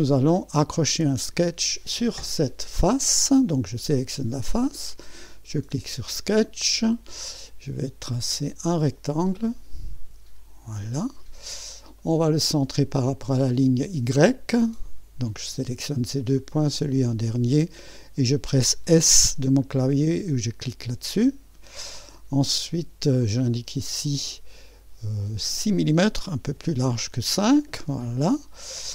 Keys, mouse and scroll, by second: 0.5-1.1 scroll up 1, 1.1 click, 5.3 click, 6.5-7.5 right drag, 8.1 click, 9.3 click, 10.5 click, 11.5 scroll up 1, 12.0-13.1 right drag, 12.2 scroll up 1, 13.8 click, 14.9 click, 16.3 click, 20.0-23.2 drag, 23.4 click, 25.2 click, 26.5-27.2 typing.